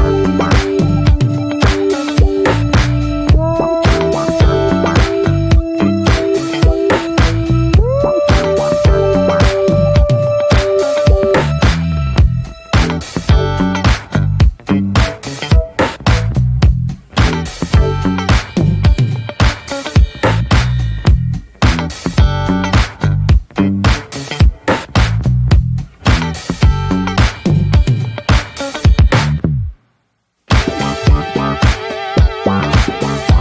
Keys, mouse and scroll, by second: 0.0 2, 0.3 click, 0.7 alt+shift+click, 0.9-1.7 middle drag, 1.7-2.1 alt+shift+drag, 2.1 middle click, 2.2-2.6 scroll up 1, 2.6-3.1 middle drag, 3.1 ctrl+b, 5.0 scroll down 2, 5.1 middle click, 5.3 scroll up 1, 5.4 click, 5.5 ctrl+a, 5.8 click, 6.2 middle click, 6.4 ctrl+s, 6.7-7.3 middle drag, 7.3 ctrl+s, 7.4-7.9 middle drag, 7.9 ctrl+s, 8.1 middle click, 8.3 scroll up 1, 8.4 Tab, 8.7 click, 9.0 shift+middle click, 9.5 ctrl+s, 9.6 drag, 9.8 scroll down 2, 9.9-10.3 shift+middle drag, 10.3 Tab, 10.4 click, 10.6 click, 10.8 shift+a, 12.2 scroll down 2, 12.5 shift+middle click, 12.6-13.2 scroll up 1, 13.2 click, 14.6-15.2 alt+middle drag, 15.2 scroll up 2, 15.7 s, 16.8 click, 17.7-18.1 drag, 19.0 middle drag, 19.2 scroll up 2, 19.4 shift+middle click, 19.8 `, 20.4 middle click, 20.7 ctrl+a, 21.0 scroll down 1, 21.2 shift+middle click, 21.4-22.5 right drag, 22.5 drag, 22.8 click, 22.9-25.3 right drag, 25.3 click, 25.7 middle drag, 25.9 Tab, 26.2-27.1 middle drag, 27.1 click, 28.4 middle drag, 28.6 click, 28.8 scroll down 2, 28.9 middle click, 29.8 3, 29.9 drag, 30.2-30.6 middle drag, 30.6 click, 32.1-32.6 shift+middle drag, 32.6-33.4 scroll up 1.